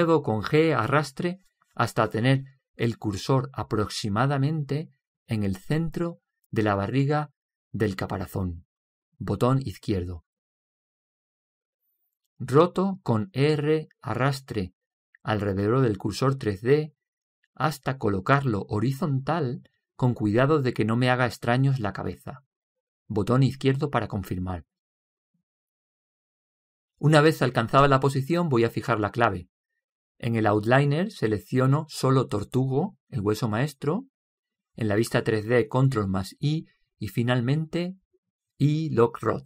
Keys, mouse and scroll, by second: 1.5 g, 14.1 r, 32.9-34.6 drag, 36.7 ctrl+i, 38.6 i, 38.9 i.